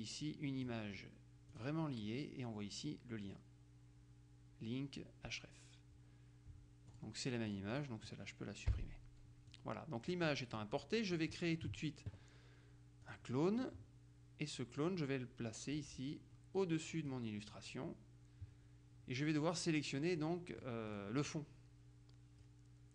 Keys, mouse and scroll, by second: 1.6 click, 7.1-8.4 drag, 8.9 Delete, 9.6-11.2 drag, 11.5 click, 13.2 click, 20.3-21.9 drag, 22.5-22.9 drag.